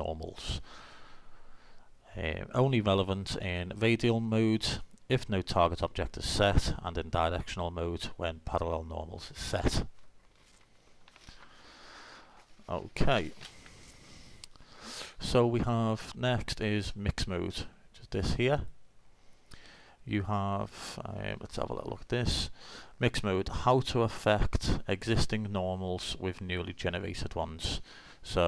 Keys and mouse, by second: 16.8-19.8 drag, 20.4 middle click.